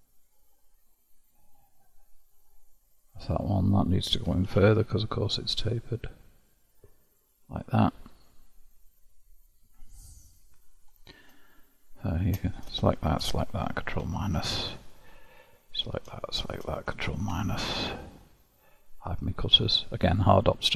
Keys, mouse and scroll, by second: 3.8 click, 4.2 g, 7.8-9.2 middle drag, 9.2-10.1 scroll down 1, 10.1 scroll down 2, 10.2-12.9 middle drag, 12.9 shift+click, 14.1 ctrl+KP_Subtract, 15.7 click, 16.3 shift+click, 17.1 ctrl+KP_Subtract, 19.1 click.